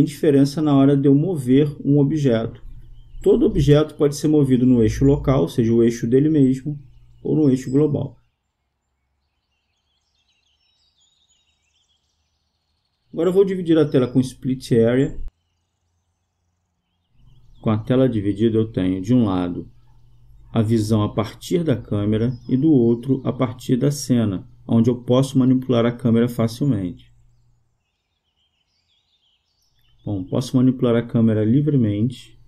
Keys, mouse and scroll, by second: 0.9-2.8 drag, 5.9-7.7 drag, 9.2-10.9 drag, 14.8-16.6 right drag, 20.1-23.2 drag, 23.5 KP_0, 28.1-29.9 drag, 30.1-31.9 drag.